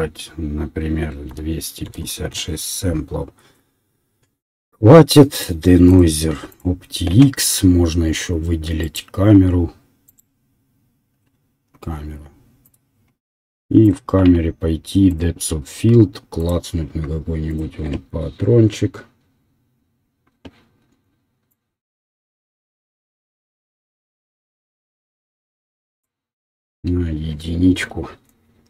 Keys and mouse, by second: 13.1 middle click, 15.1 click, 20.1-21.5 middle drag, 21.5-24.2 drag, 26.2-28.6 drag.